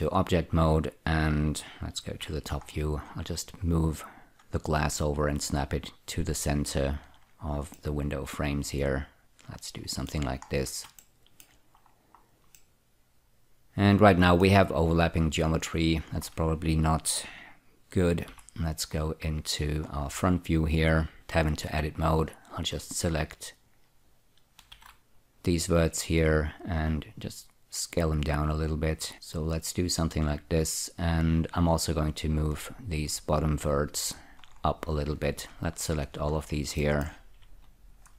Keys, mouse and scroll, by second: 2.5 F2, 3.2-4.0 scroll up 1, 4.0 click, 8.0-10.6 middle drag, 10.8-11.2 scroll down 2, 11.3 shift+middle click, 12.2 scroll up 1, 12.9-14.8 middle drag, 14.8 middle click, 16.4-18.3 scroll down 2, 18.6 F4, 19.4-20.2 scroll up 1, 20.2-21.1 scroll up 1, 21.3 1, 22.6 click, 23.8-24.5 scroll up 2, 24.9 space, 25.0 s, 26.8-29.1 drag, 29.1 z, 32.8-34.4 drag, 34.7-35.2 scroll down 4, 35.8 shift+click, 36.7 scroll down 1, 37.1 shift+middle click, 38.0 shift+click.